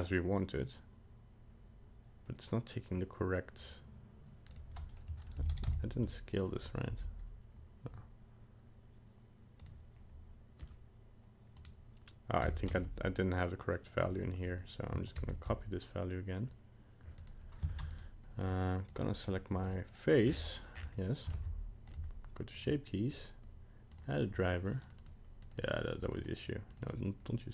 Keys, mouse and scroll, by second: 5.4 alt+r, 5.5 alt+g, 5.7 alt+d, 5.8 alt+s, 6.9 g, 11.6 click, 12.4 g, 15.2 ctrl+c, 17.2 right click, 17.7 ctrl+Tab, 17.9 right click, 18.4 right click, 18.9 right click, 19.3 right click, 19.7 right click, 20.3 scroll down 7, 20.7 scroll up 8, 21.3 ctrl+Tab, 22.5 click, 23.1 right click, 25.0 click, 25.7 click, 26.2 click, 26.9 click.